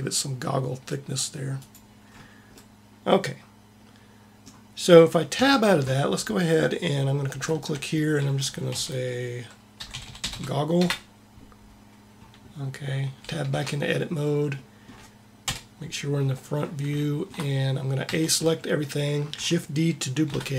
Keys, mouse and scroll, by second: 1.9 middle click, 5.2 Tab, 9.9 g, 13.4 Tab, 15.4 KP_1, 17.9 a, 18.2 a, 20.2 shift+d.